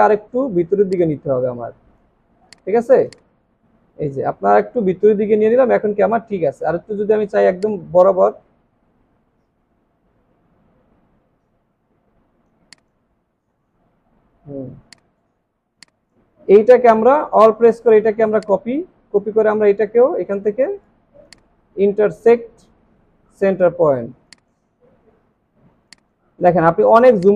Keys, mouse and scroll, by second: 2.0-2.4 alt+scroll down 1, 2.4 space, 3.4 alt+scroll up 1, 13.3-14.1 alt+scroll up 2, 14.5-14.9 alt+scroll down 1, 15.3-15.7 alt+scroll down 4, 15.7 space, 17.3-17.7 alt+scroll down 1, 21.7 alt+scroll up 1, 25.5 alt+scroll down 1, 25.8 space.